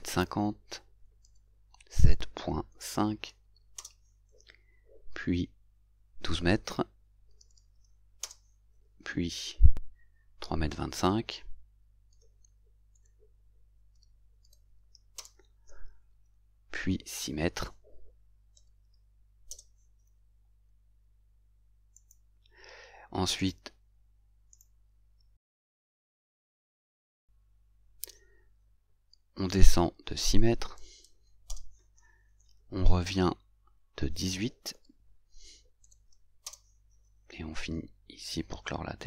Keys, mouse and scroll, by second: 1.4 shift+7, 2.1 shift+., 2.8 shift+5, 3.8 Return, 7.2-8.1 typing, 8.3 Return, 13.0 shift+., 14.0 shift+2, 14.6 shift+5, 15.2 Return, 18.6 shift+6, 19.6 Return, 22.1 click, 23.5 right click, 24.6 right click, 30.8 shift+6, 34.8 shift+1, 35.9 shift+8, 36.6 Return.